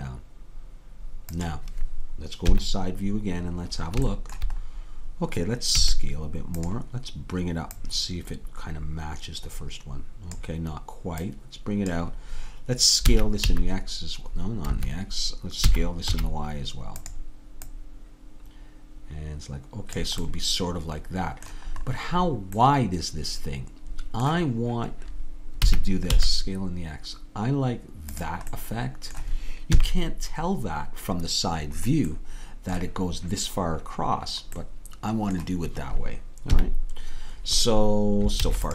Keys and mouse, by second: 2.6 KP_3, 5.9 s, 13.1 s, 15.8 s, 17.8-20.0 drag, 25.6 s, 29.8 KP_3, 36.6 KP_3, 38.5 ctrl+s.